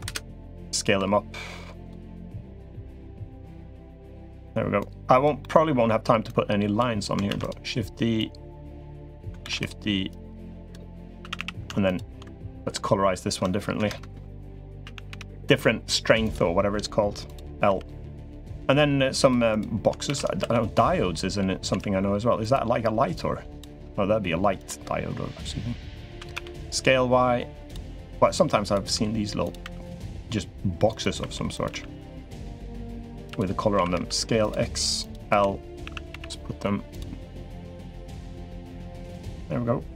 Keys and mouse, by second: 0.7 s, 2.3 click, 3.2 middle click, 4.6 click, 5.2 middle click, 6.1 click, 7.1 shift+d, 7.9-9.1 drag, 9.2 shift+d, 9.9 click, 11.0 a, 11.1 a, 11.6 alt+shift+click, 13.6 ctrl+KP_Add, 14.6 a, 14.9 g, 17.0 click, 17.4 l, 18.1-19.1 drag, 19.3 click, 19.9 shift+d, 20.2 s, 21.5 s, 23.0 click, 23.6 s, 25.8 s, 28.1 click, 28.7 s, 29.4 e, 31.0 e, 31.5 s, 32.2 click, 33.0 3, 33.5 s, 34.8 click, 35.1 l, 35.6 a, 35.9 g, 38.0 g, 39.7 click.